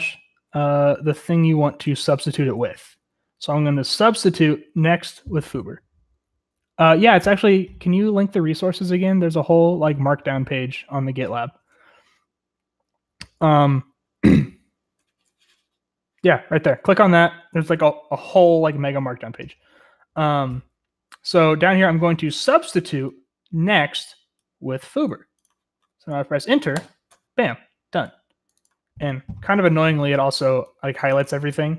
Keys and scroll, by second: 0.9-2.8 typing, 26.7 Return.